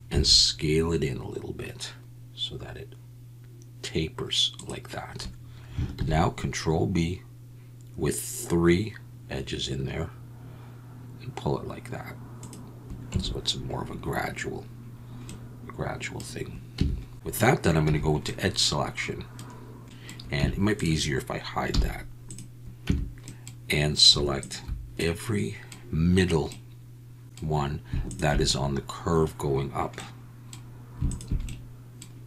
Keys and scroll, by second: 0.1 s, 5.9 ctrl+b, 13.1 Tab, 16.7 Tab, 17.4 alt+a, 17.8 2, 20.4 Tab, 21.7 h, 22.8 Tab.